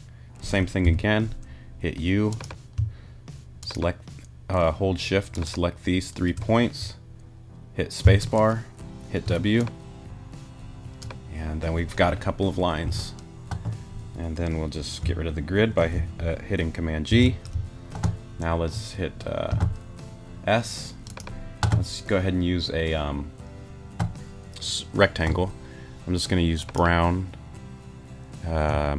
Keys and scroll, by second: 0.8 u, 8.0 space, 9.2 w, 12.8 t, 17.1 super+g, 19.5 s.